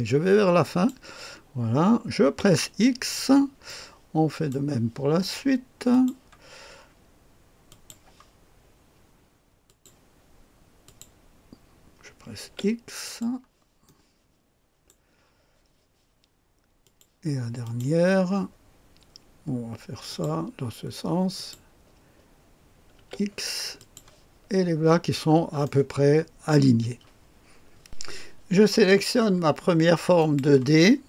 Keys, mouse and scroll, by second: 0.6 click, 2.2 x, 3.0-4.5 drag, 5.9 click, 7.6 click, 9.6 click, 10.8 click, 12.4 typing, 13.0 click, 13.8-14.9 drag, 16.8 click, 17.6 click, 20.1 click, 20.2 typing, 21.3 click, 23.0 typing, 23.7 click, 24.7-25.6 scroll down 1, 25.6-27.4 drag, 27.8 click, 30.1 click, 30.9-31.0 scroll up 2.